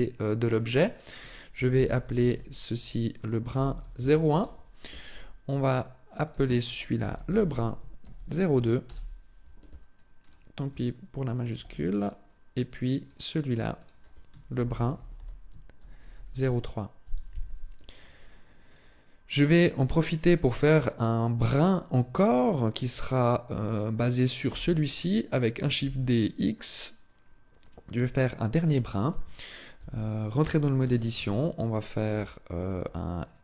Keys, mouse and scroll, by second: 0.2 click, 5.4 click, 6.0 click, 10.0 click, 12.8 click, 13.5 click, 19.1 right click, 20.6-21.0 scroll down 1, 24.2 shift+d, 27.4 click, 29.5 Tab, 30.6 a, 31.6-32.0 scroll down 1, 32.0 shift+middle click, 33.2 s.